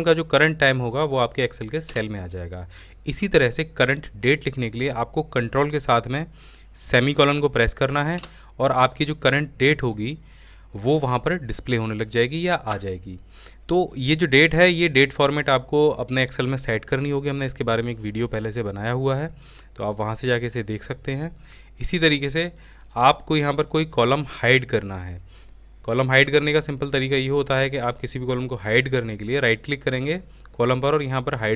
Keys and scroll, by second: 4.2-5.2 typing.